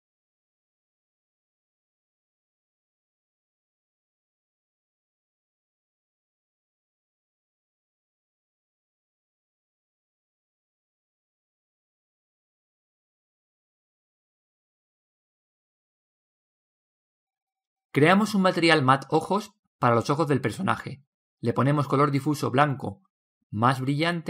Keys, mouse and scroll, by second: 5.9-9.2 drag, 12.7-14.5 drag, 14.9-18.7 drag, 22.1-24.2 drag.